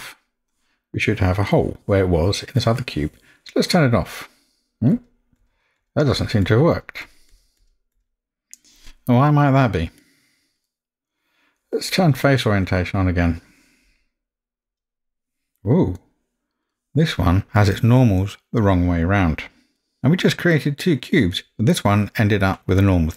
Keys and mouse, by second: 4.6-8.6 drag, 10.2 middle click, 12.7-15.3 drag, 16.0-16.6 middle drag.